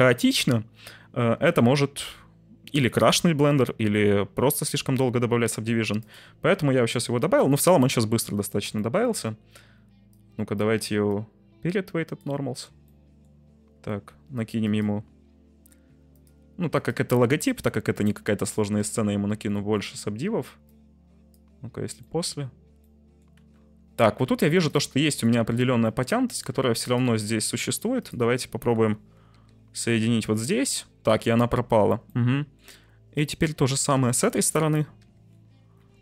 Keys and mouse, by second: 7.9 middle click, 8.7 shift+middle drag, 10.2 click, 11.0-12.1 drag, 13.0 middle click, 14.6 right click, 16.1 right click, 16.7 right click, 17.5-18.2 middle drag, 18.4 shift+middle drag, 18.8-19.8 middle drag, 20.6-21.3 middle drag, 22.1 middle click, 22.9 middle click, 23.5 Tab, 24.2 1, 25.1 shift+middle click, 25.9 shift+middle click, 26.5 1, 29.7 j, 30.2 Tab, 31.2 Tab, 32.0 middle click, 33.2 right click, 34.0 shift+click, 35.4 j, 35.8 Tab.